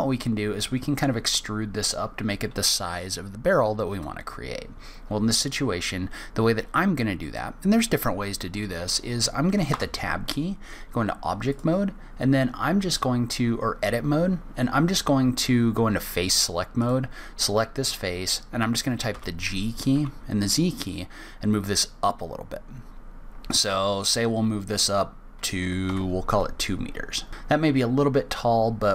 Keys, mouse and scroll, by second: 1.6-3.0 scroll up 2, 9.7 Tab, 11.5 click, 13.0 click, 15.9 click, 16.8 click, 19.1 g, 27.3 scroll down 1, 28.3 scroll down 2, 28.5-28.9 scroll up 1.